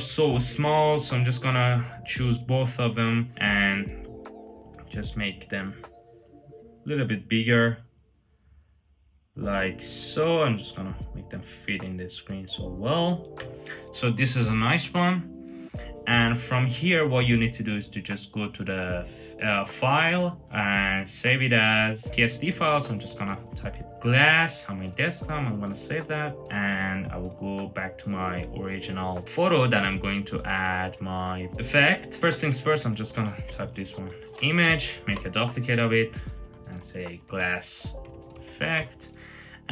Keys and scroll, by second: 3.1 super+t, 9.6 Left, 9.7 Left, 9.9 Left, 11.2 Up, 13.2 Return, 22.6-24.0 typing, 33.0-34.4 typing, 34.9 super+j, 36.0-38.7 typing.